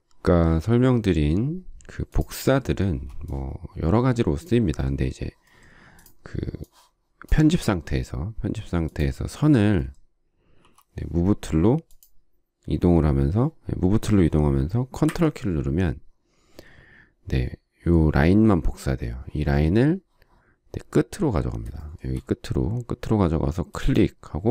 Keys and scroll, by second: 2.6 space, 10.4 m.